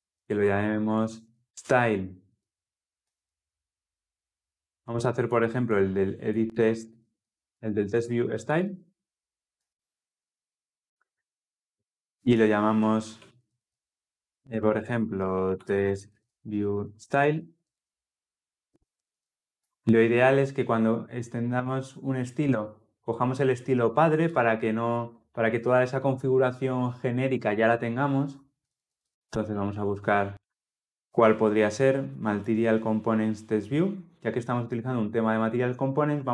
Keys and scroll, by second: 9.4 Return, 19.4 Return.